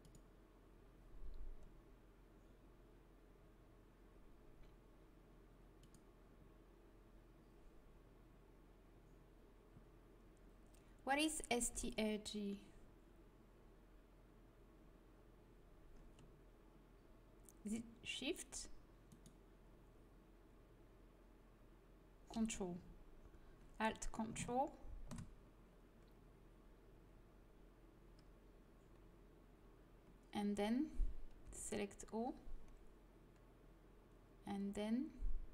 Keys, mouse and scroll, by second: 1.4-5.3 drag, 5.7-7.7 drag, 19.0-20.7 drag, 20.7 middle click, 31.3 l.